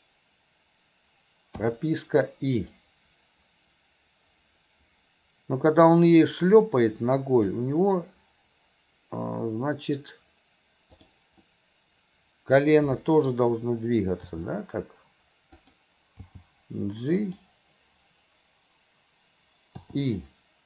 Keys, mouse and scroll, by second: 2.8-7.6 drag, 10.9 click, 11.4-13.3 middle drag.